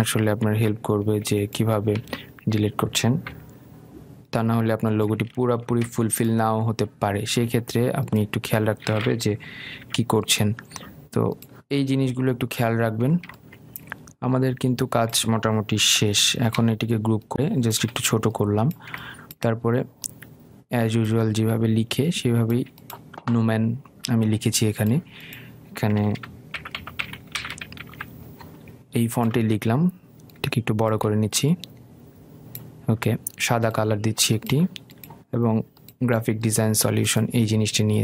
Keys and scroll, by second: 1.7 ctrl+z, 4.5 Delete, 17.0 ctrl+g, 29.2 ctrl+a.